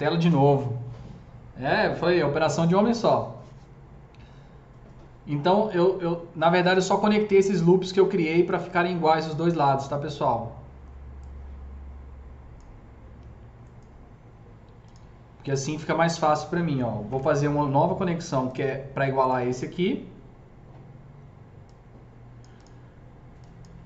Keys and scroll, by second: 17.0 KP_0.